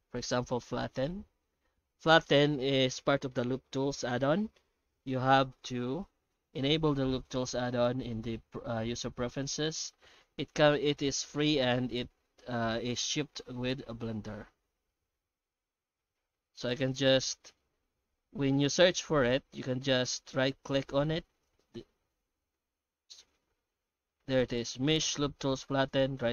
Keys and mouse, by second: 1.1 t.